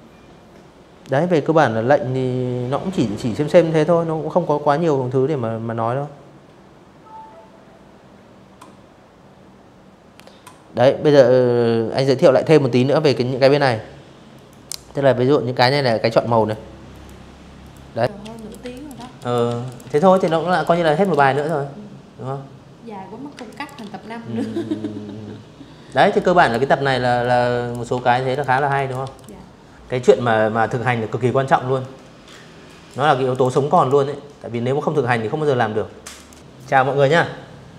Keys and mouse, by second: 12.0 click, 14.1 click, 14.6 click, 15.3 click, 15.7 click, 17.0-18.8 typing, 17.2 click, 18.2 click, 18.5 click, 19.0 click, 21.0 space, 21.2 click, 21.5 v, 23.8 click, 24.9 click, 25.6 Delete, 26.0 click, 26.3 z, 26.4 click, 26.7 v, 26.8 click.